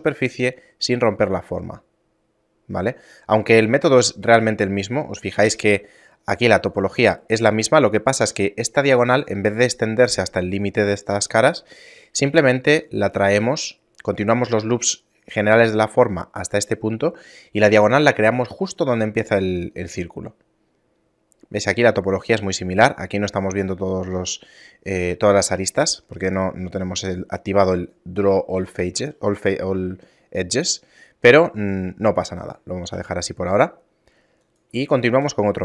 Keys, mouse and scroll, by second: 2.1 middle click, 2.5 scroll down 2, 3.5-3.8 scroll up 3, 4.2 scroll down 1, 4.3 scroll down 1, 5.1 z, 5.6 scroll up 1, 6.3 right click, 6.3-6.9 scroll up 1, 19.5 Tab, 20.1-20.4 scroll down 4, 26.6 z, 27.8-28.2 scroll down 3, 28.2 a, 28.6 a, 29.3 middle click, 29.8 scroll down 2, 32.5 g, 34.8 shift+a.